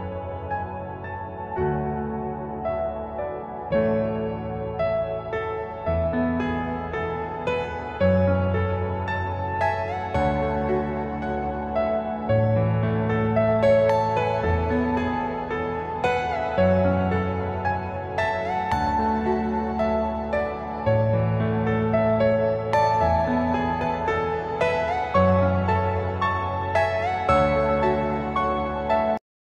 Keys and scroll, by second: 2.2 F2, 12.4 c, 13.9 Escape, 22.7 F2, 25.5 F4.